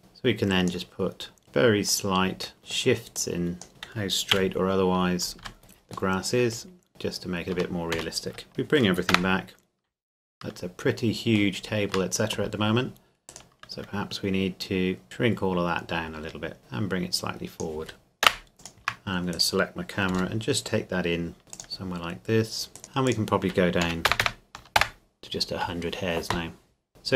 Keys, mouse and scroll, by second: 0.0 click, 2.6 middle click, 3.2 click, 4.3 a, 5.4 x, 5.6 Tab, 6.1 middle click, 6.8-7.2 scroll down 1, 7.2-7.5 scroll up 1, 7.5 Tab, 8.5 shift+click, 9.1 KP_0, 11.6-13.3 shift+middle drag, 13.3 right click, 15.0 s, 16.6 click, 18.2 KP_0, 18.5 right click, 18.6 shift+click, 19.3 right click, 20.1 g, 20.3 middle click, 21.5 click, 22.8 right click, 23.1 click, 23.8 KP_1, 24.1 KP_0, 24.8 KP_Enter, 26.9 click.